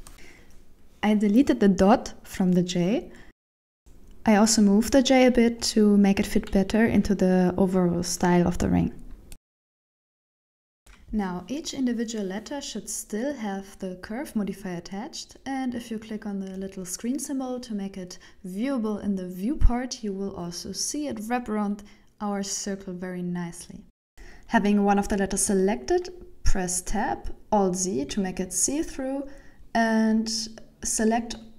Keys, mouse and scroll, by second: 0.1 right click, 0.1 scroll down 4, 0.1 x, 0.4-0.8 scroll down 3, 1.0 shift+middle click, 1.9 scroll up 4, 2.6 right click, 3.4 g, 9.3 shift+right click, 9.3 g, 10.5 Tab, 10.5 ctrl+l, 10.5 shift+middle click, 10.5 right click, 10.5 p, 10.9 shift+middle click, 11.4 middle click, 12.1 right click, 12.4 shift+middle click, 13.2 right click, 13.6 shift+middle click, 14.9 KP_1, 16.7 scroll up 3, 17.9 click, 20.0 click, 21.0-22.8 scroll up 3, 22.8 Tab, 24.9 shift+middle click, 27.1 alt+z, 28.0 b, 31.0 g.